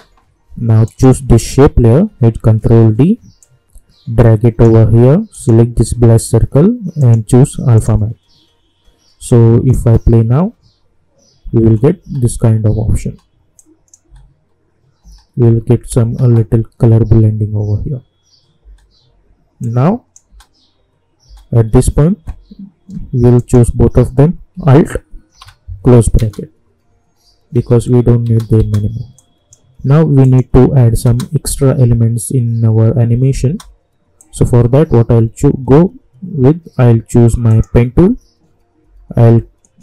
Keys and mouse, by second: 2.5 ctrl+d, 3.4-9.8 drag, 9.8 space, 13.5 click, 14.0 space, 18.7 space, 19.6 click, 20.3 space, 23.3 shift+click, 25.3 alt+], 26.2 space, 29.1 click, 30.6 u, 31.0 space, 33.4 space, 34.2 click, 37.5 click.